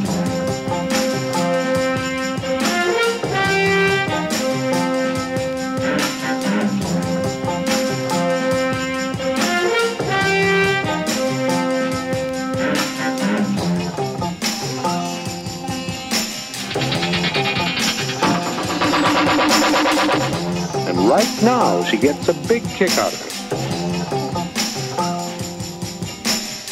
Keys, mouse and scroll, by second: 0.2 click, 1.0-2.4 drag, 3.6 click, 4.3 click, 5.0 middle click, 6.4 click, 7.2 click, 7.4 Escape, 7.4 KP_3, 7.9 g, 8.1 z, 9.2 click, 10.3 click, 11.1 click, 11.4 click, 11.5 click, 12.5 click, 12.6 middle click, 13.5 click, 13.9 middle click, 14.1 click, 15.5 g, 15.7 z, 16.7 Escape, 17.3 click, 18.6 g, 18.8 z, 19.7-20.4 drag, 20.7 shift+click, 21.2 click, 21.6 g, 21.7 click, 22.2 g, 22.5 click, 22.7 middle click, 23.5 g, 23.6 g, 23.8 click, 23.9 g, 25.1 click, 25.1-26.1 typing, 26.5 drag.